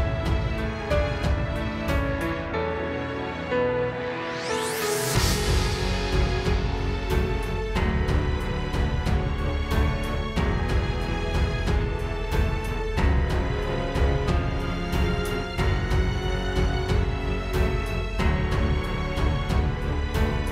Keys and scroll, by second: 3.1 space, 3.6 space, 6.7 space, 10.5 space, 13.4 space, 13.9 space, 18.4 space, 18.7 space, 19.5 super+space.